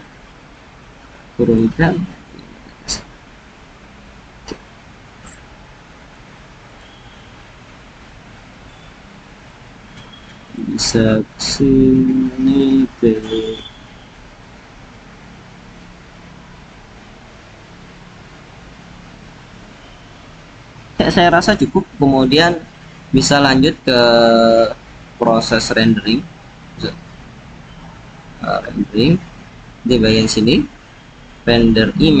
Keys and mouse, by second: 6.7 click, 9.4 click, 10.5 click, 14.4 click, 30.1-32.2 drag.